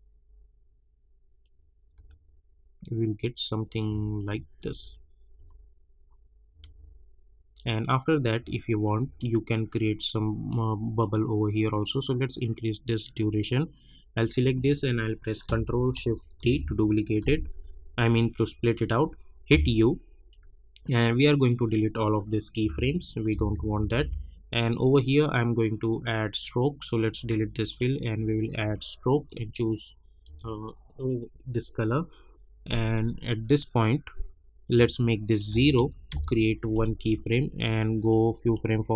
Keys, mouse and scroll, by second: 1.9 space, 3.2 click, 3.9 space, 7.7-12.8 drag, 16.3 ctrl+shift+d, 19.4 u, 20.3-23.3 drag, 23.3 -, 23.5 -, 23.7 -, 23.9 -, 24.9-30.2 drag, 30.2 Return, 33.5-34.3 alt+scroll up 1, 35.2 click, 36.1 Return, 36.7-38.9 drag.